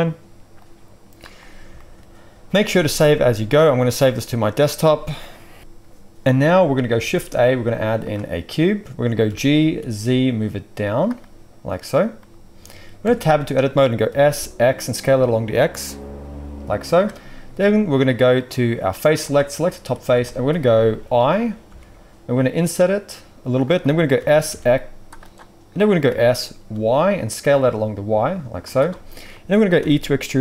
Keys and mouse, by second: 0.6-10.9 drag, 2.6 ctrl+s, 6.9 shift+a, 9.2 g, 10.9-18.4 middle drag, 13.0 Tab, 14.0 s, 18.4-19.3 drag, 19.3-30.4 middle drag, 21.7 i, 24.1 s, 26.0 s, 29.8 e.